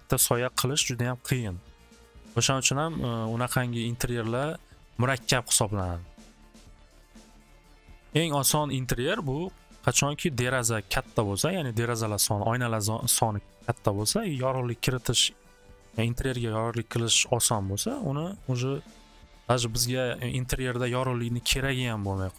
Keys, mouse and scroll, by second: 4.4 click, 4.6 click, 5.2 click, 5.7 click, 8.0 click, 11.0-13.2 drag, 18.4 click, 18.7 click, 19.1 click.